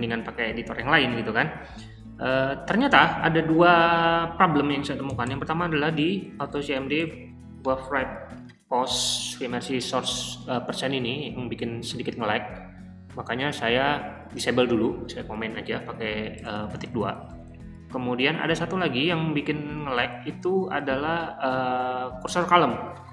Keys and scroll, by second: 5.1-7.4 typing, 16.3-18.1 typing, 18.5 ctrl+f, 19.5-20.5 typing, 20.8 ctrl+f.